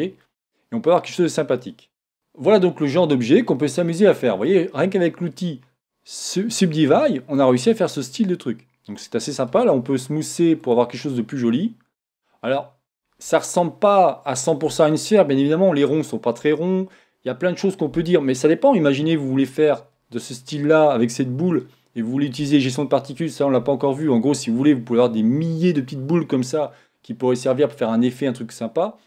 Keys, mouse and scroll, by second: 0.2-1.8 middle drag, 4.4-6.3 middle drag, 7.7-9.4 middle drag, 10.6 click, 11.5-13.2 middle drag, 13.2-14.7 scroll up 1, 14.7 scroll up 1, 20.5-22.4 scroll down 1, 22.4-27.1 scroll down 1.